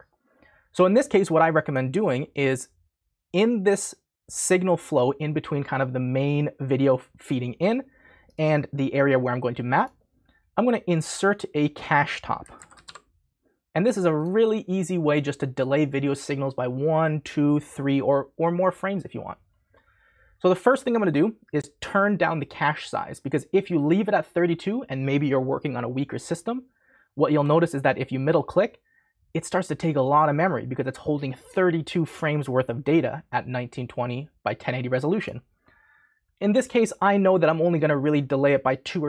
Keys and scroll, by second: 12.2-13.3 typing.